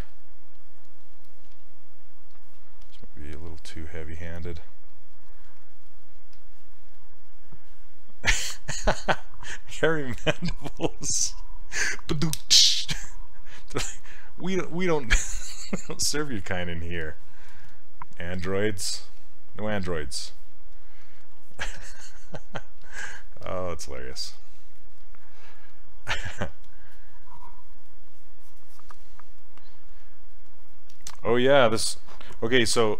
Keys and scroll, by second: 1.5 s, 18.4 s.